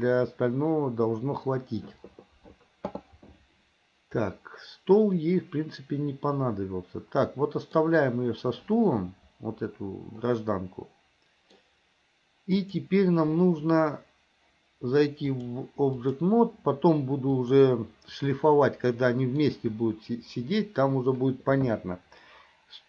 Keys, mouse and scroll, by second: 4.4-7.9 middle drag, 10.3-11.8 middle drag, 12.7 click, 15.5 click, 17.3 click, 18.5-19.6 middle drag.